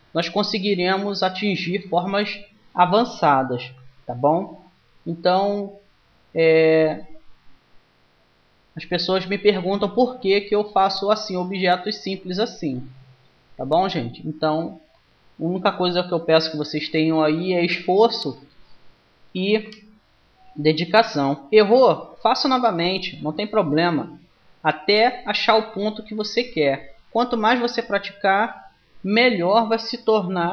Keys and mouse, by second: 1.9-3.7 right drag, 4.7 g, 9.9-14.7 middle drag, 14.7-16.4 drag, 19.5 w, 22.3-24.0 drag, 23.5 g.